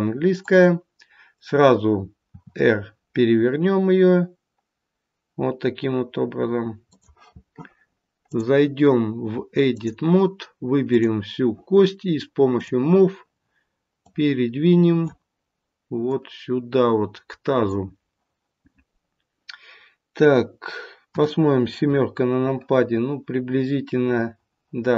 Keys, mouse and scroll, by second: 2.3 r, 8.2 click, 10.8 click, 13.9 click, 16.0 click, 21.0 KP_7, 22.2-22.8 scroll down 1.